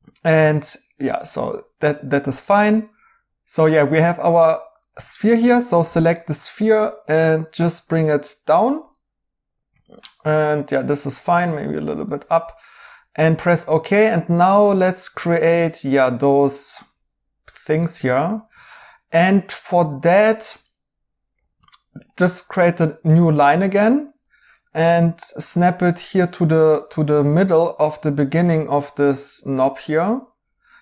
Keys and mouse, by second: 2.4 right click, 3.3 ctrl+z, 5.0 right click, 5.8 g, 14.6 right click, 18.0 right click.